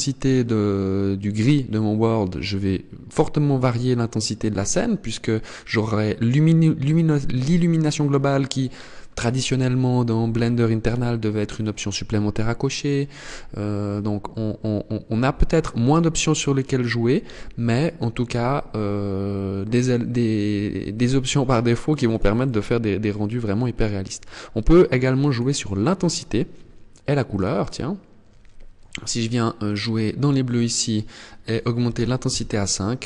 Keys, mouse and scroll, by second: 24.8 click, 27.1 click, 30.2 click.